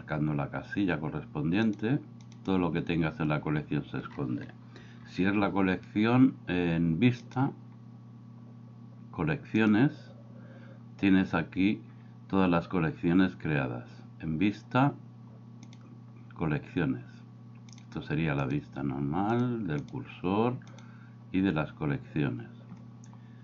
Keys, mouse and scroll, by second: 2.3 click, 4.8 n, 7.3 click, 15.7 click, 17.7 click, 18.4 click, 19.4 click, 19.8 click, 20.8 click.